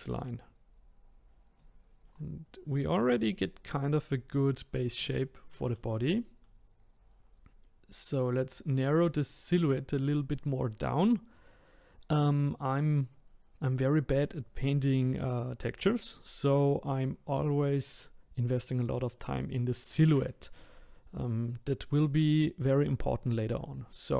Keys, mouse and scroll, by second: 2.9-3.8 scroll, 5.1-8.2 middle drag.